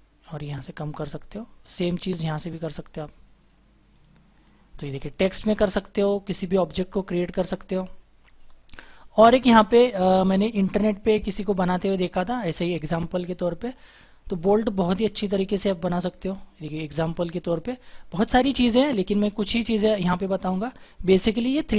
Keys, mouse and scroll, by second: 4.7-5.2 scroll down 1, 7.7-10.5 scroll up 1, 18.6-19.2 scroll down 1, 19.2-21.2 scroll up 1.